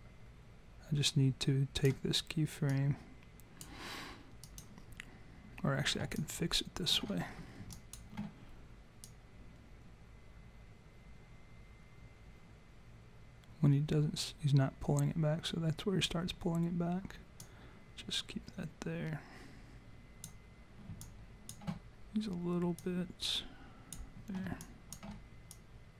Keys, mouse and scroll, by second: 2.7 click, 4.4 click, 6.2 alt+click, 6.5 alt+click, 7.3 scroll up 4, 7.7 alt+click, 9.1 click, 17.4 click, 21.0 alt+click, 22.7 click, 24.6 alt+click, 25.5 click.